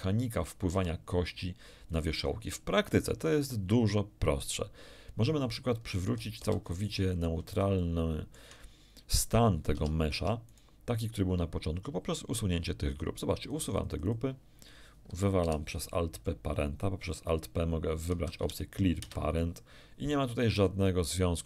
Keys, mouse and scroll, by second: 0.7 r, 1.9 click, 6.3 alt+r, 7.7 shift+middle click, 9.7 Tab, 10.1 Tab, 10.4 right click, 13.4 click, 15.4 alt+p, 18.1 Down, 18.3 Up, 18.9 Return, 20.5 g.